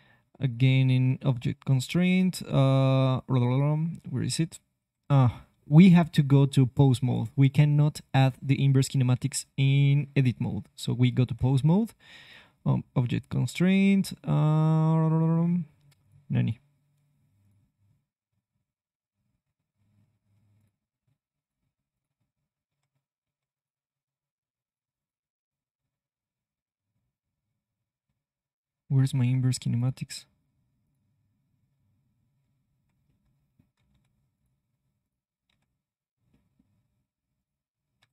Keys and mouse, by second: 9.1 ctrl+Tab, 11.3 ctrl+Tab, 12.2-15.8 drag, 15.9-19.6 drag, 20.0 click, 22.3 click, 22.6 Tab, 23.2 Tab, 32.7 Escape, 33.9 Tab, 34.3 right click, 35.5 Tab.